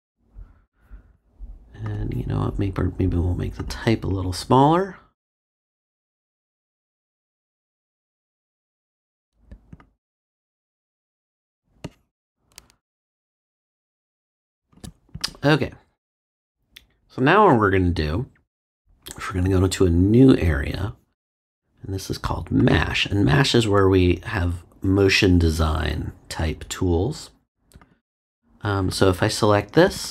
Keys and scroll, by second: 0.0 Return.